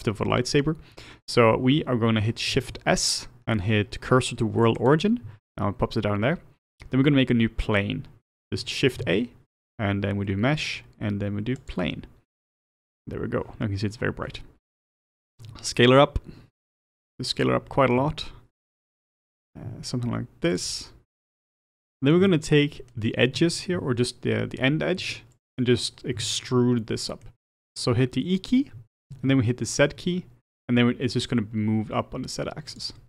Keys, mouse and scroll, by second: 4.9 shift+s, 11.7 shift+a, 12.5 scroll down 2, 15.5 s, 17.0 s, 18.9-19.7 scroll down 5, 19.7 s, 20.8-21.2 scroll down 4, 21.2 s, 21.9-23.7 middle drag, 23.7 Tab, 25.0 2, 25.6 click, 25.9-26.3 scroll down 2, 26.3-28.7 shift+middle drag, 28.7 e.